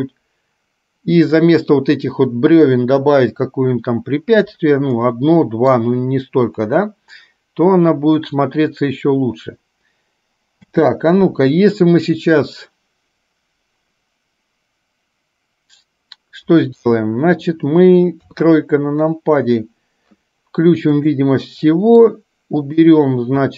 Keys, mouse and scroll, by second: 5.1 middle click, 10.8 space, 16.9 KP_1, 18.3 KP_3, 21.0 click, 21.8 middle click, 22.6 click.